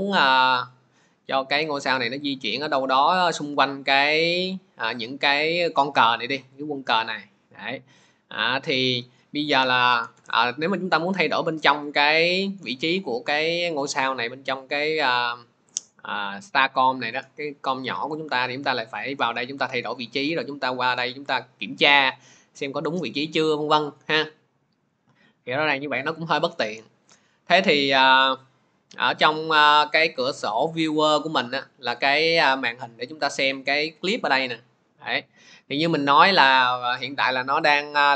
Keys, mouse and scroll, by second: 3.2 click, 7.9 click, 10.0 ctrl+z, 11.1 click, 20.0 click, 20.9 click.